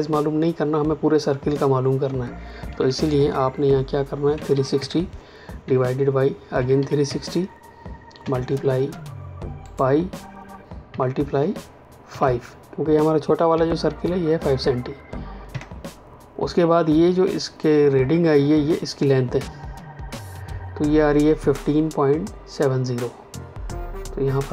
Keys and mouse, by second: 2.8 Escape, 4.3 KP_3, 5.6 KP_Divide, 6.5 KP_3, 8.1 KP_Multiply, 9.6 click, 10.8 KP_Multiply, 12.0 KP_5, 15.4 KP_Enter, 24.4 click.